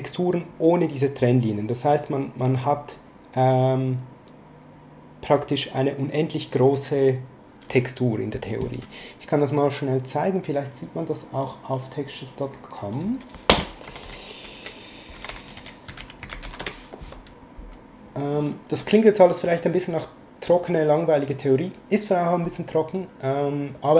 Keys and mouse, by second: 0.5 click, 1.5 click, 11.4 click, 12.9 click, 13.6-16.4 typing, 16.6 Return.